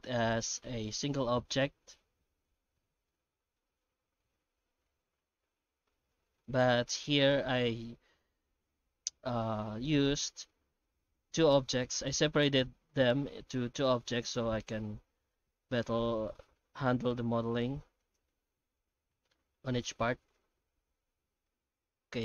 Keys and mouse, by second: 0.0 shift+right click, 3.1-6.4 middle drag, 6.7 right click, 7.0 Tab, 7.5 Tab, 7.9-9.4 middle drag, 9.9 shift+middle drag, 10.3 Tab, 10.5 middle click, 11.2 1, 11.8 alt+a, 12.2 middle click, 14.4 middle click, 15.5 2, 18.1 alt+shift+right click, 18.7-19.8 middle drag.